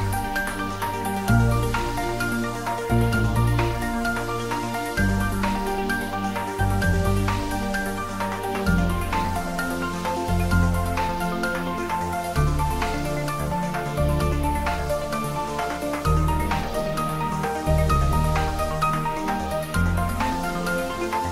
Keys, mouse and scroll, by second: 1.9 click, 2.1-3.9 middle drag, 5.0-7.8 ctrl+middle drag, 7.8 g, 8.0 z, 8.6 click, 10.7 ctrl+z, 13.0 click, 13.3 e, 15.1 click, 17.2 click, 17.4 e, 19.8-20.9 drag.